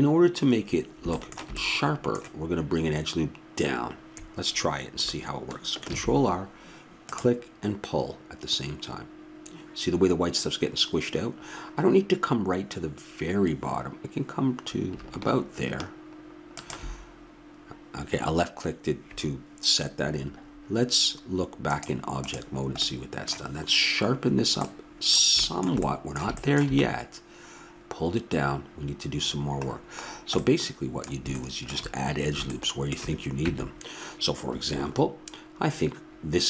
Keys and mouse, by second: 5.9 ctrl+r, 21.7-23.3 drag, 23.3 middle click, 33.5 Tab.